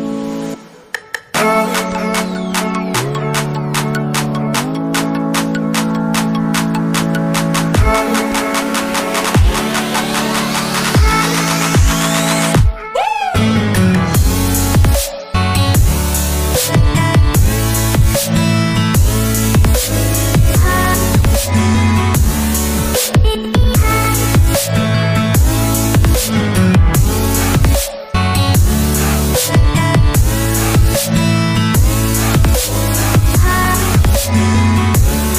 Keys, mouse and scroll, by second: 0.9-2.6 typing, 3.6 Return, 7.2 alt+Tab, 10.0 alt+Tab, 18.8 alt+Tab, 29.5 Escape.